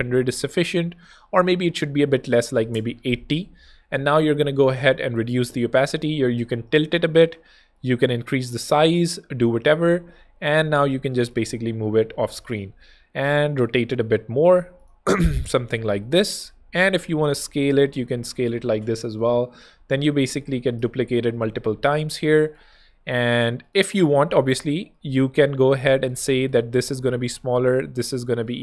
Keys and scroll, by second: 2.0-3.8 typing, 3.6 Escape, 20.8 alt+shift+super+[, 21.7 shift+super+d.